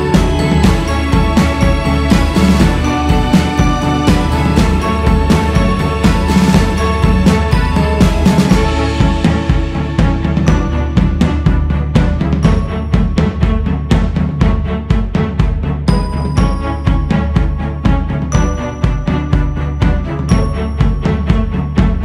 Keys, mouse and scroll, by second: 2.8 click, 3.6 z, 5.0 ctrl+right click, 6.5 ctrl+z, 9.3-12.4 drag, 13.4-14.3 scroll down 3, 14.3 click, 15.2-15.9 scroll up 2, 15.9-19.0 drag, 19.9 scroll down 2, 21.4 click.